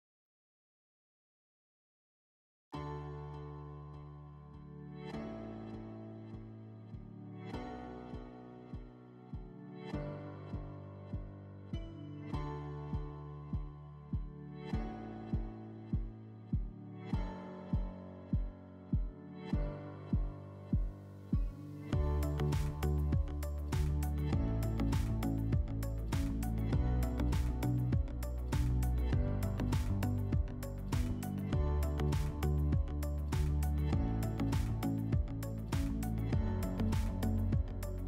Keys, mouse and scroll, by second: 4.2-5.8 drag, 10.1 click, 10.2 click, 11.4-13.8 typing, 12.9 Return, 19.0-20.6 drag, 26.1 click, 27.9 middle click, 29.1 click, 30.2 click, 34.9-36.4 drag.